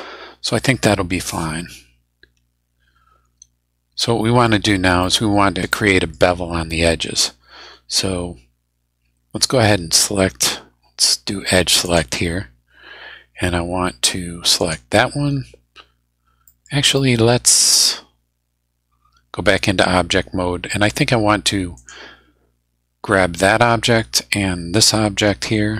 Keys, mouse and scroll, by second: 4.0 middle click, 4.6-4.9 scroll down 1, 5.0 middle click, 5.1-5.7 scroll up 2, 5.7 middle click, 11.8 click, 14.6 right click, 16.5 middle click, 17.0-18.0 middle drag, 19.8 Tab, 21.8 right click, 23.4 middle click.